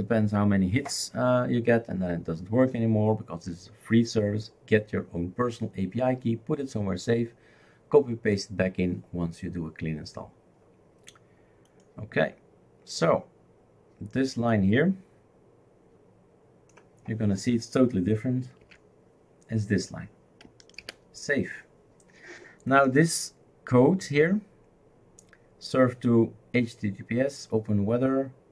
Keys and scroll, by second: 18.6 ctrl+v, 20.8 ctrl+s.